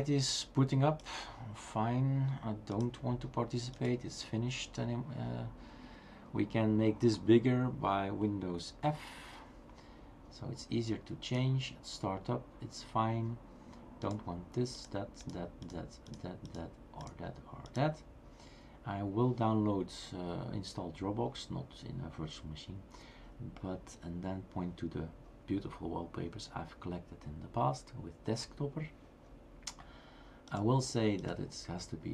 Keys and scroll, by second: 8.7 super+f.